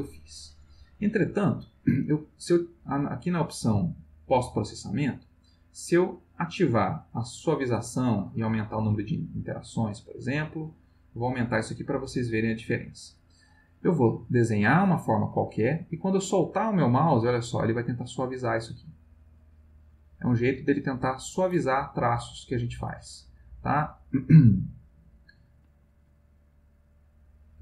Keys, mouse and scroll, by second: 0.7 click, 5.4 click, 7.8 click, 10.3-12.8 drag, 14.5-16.9 drag, 18.7-20.1 drag, 20.6 click, 22.1 click, 23.9 click, 27.3-27.6 drag.